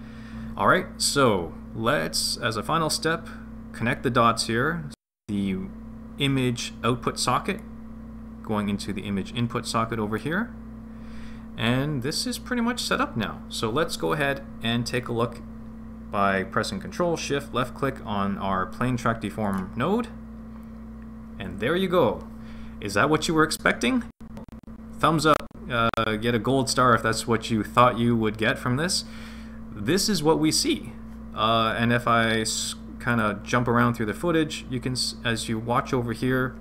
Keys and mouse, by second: 7.6 click, 7.9-11.3 drag, 19.4 ctrl+shift+click, 33.0 click.